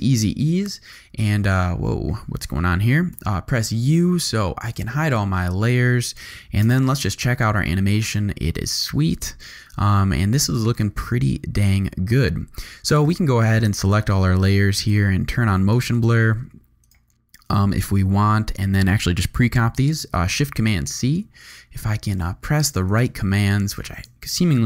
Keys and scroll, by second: 0.6 `, 3.1 u, 4.6 u, 6.6 0, 12.9 space, 20.2 shift+super+v.